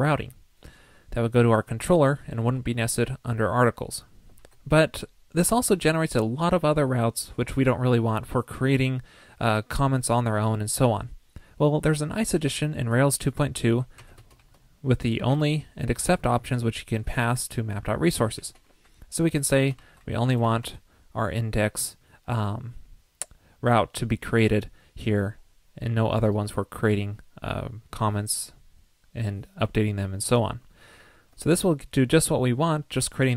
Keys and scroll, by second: 4.4 super+s, 18.3 ctrl+l, 31.5 super+s.